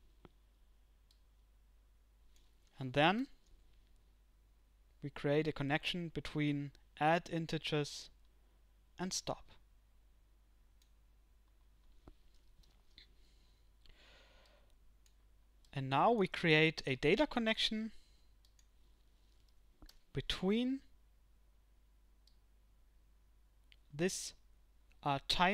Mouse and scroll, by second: 22.3-25.5 drag.